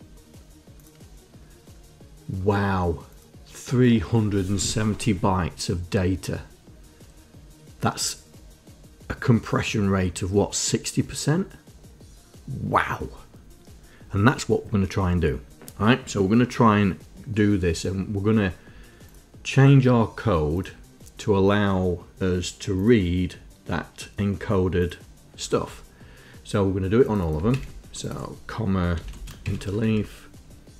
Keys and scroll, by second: 27.8 ctrl+Insert, 29.3 ,, 29.5 space, 29.8 shift+Insert, 30.2 Down.